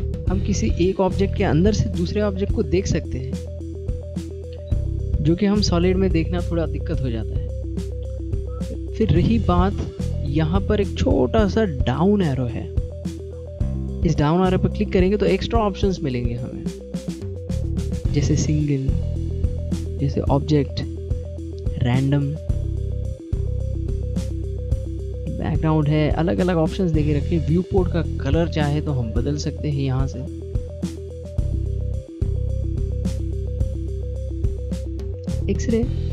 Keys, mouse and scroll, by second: 1.3 click, 3.1 middle click, 4.2 click, 5.6 click, 6.4 click, 8.1 middle click, 10.3 click, 15.0 click, 20.4 middle click, 21.5 click, 24.0 click.